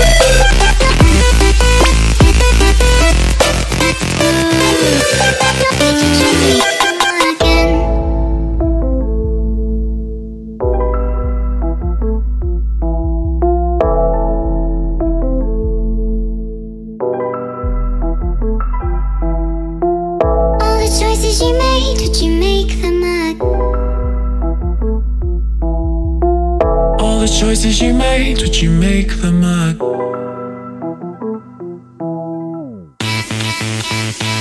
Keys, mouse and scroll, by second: 0.8 click, 1.4 click, 1.7 ctrl+click, 7.7 click, 14.8 click, 17.0 click, 18.0 click, 19.2 click, 20.0 click, 21.1 click, 23.2 click, 23.2 click, 25.0 click, 26.3 ctrl+click, 26.6 ctrl+click, 27.7 click, 28.0 click, 30.9 click, 31.1 ctrl+space, 31.3 click, 32.3 click, 32.6 ctrl+click, 33.5 click.